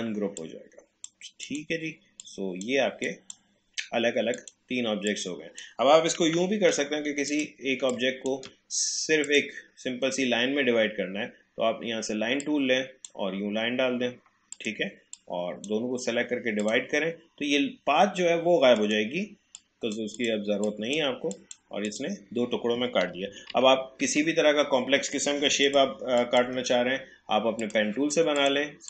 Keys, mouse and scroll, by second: 6.2 Delete, 7.3-9.2 drag, 12.4-16.6 drag, 18.8 right click, 19.6 click, 23.1 ctrl+z, 25.7 click, 26.4 Delete, 27.6 click.